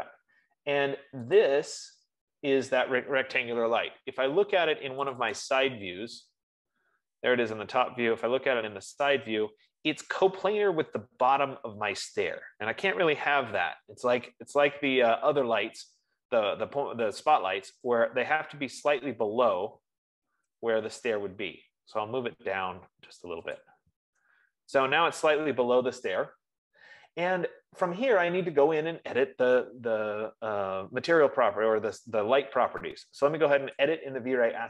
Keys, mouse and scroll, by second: 0.1 click, 1.8 click, 5.6 click, 6.2 click, 8.7-10.2 scroll, 10.2-11.2 scroll, 13.3-14.4 typing, 18.5 click, 24.0 shift+click, 34.4 click.